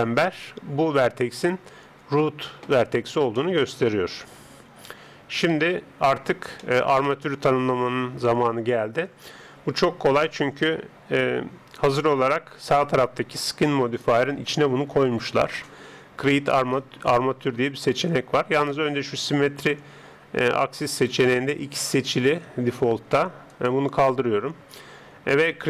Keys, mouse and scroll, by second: 3.5-5.1 middle drag, 5.5 KP_3, 9.7 Tab, 23.5 click.